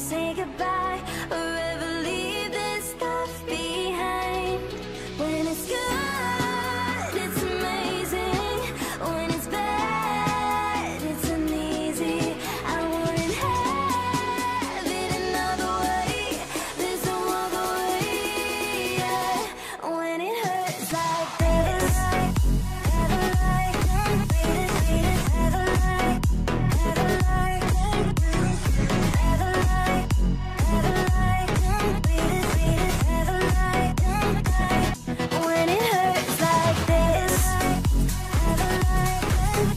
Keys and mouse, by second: 0.0 m, 1.3 shift+click, 2.0 alt+a, 3.3-5.8 middle drag, 5.8 click, 7.1 k, 8.8 alt+a, 9.1-10.4 middle drag, 10.4 click, 10.9 shift+click, 11.8 x, 12.1-16.0 middle drag, 18.4-23.7 middle drag, 24.3 KP_Decimal, 24.5 alt+a, 24.9-28.8 middle drag, 29.4 click, 29.9 KP_Decimal, 31.4-32.8 shift+middle drag, 34.0 middle click, 34.8 g, 37.2 Tab, 37.6 alt+a, 38.0 middle click, 39.1 KP_1.